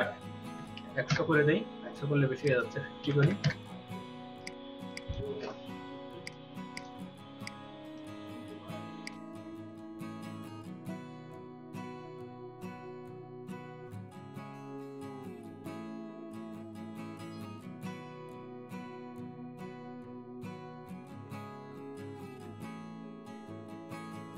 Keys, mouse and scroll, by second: 0.5-0.9 typing, 1.1 Return, 2.9 typing, 3.3 Return, 13.9 alt+click, 14.4 space, 15.0 ctrl+click, 15.2 space, 16.4 space, 16.6 scroll down 6, 17.5 space, 17.5 double click, 17.7 space, 18.1 space, 18.3 ctrl+click, 19.5-19.9 scroll down 3, 20.0 Down, 20.0 click, 21.3-22.7 drag, 21.7 space, 22.0 middle click, 22.3 space, 22.9-23.6 drag, 23.1-23.6 scroll down 1.